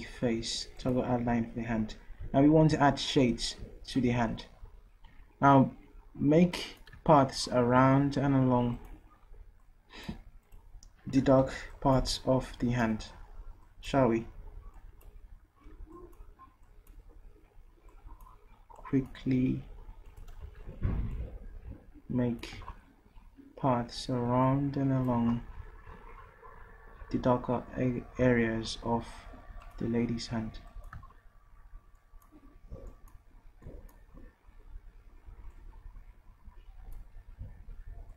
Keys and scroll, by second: 11.2 ctrl+z, 20.4 d.